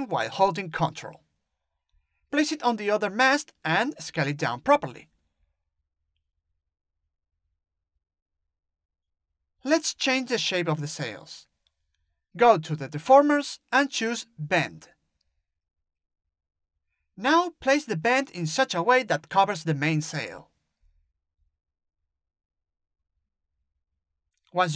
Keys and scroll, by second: 3.6 t, 4.6 t, 23.4 ctrl+z.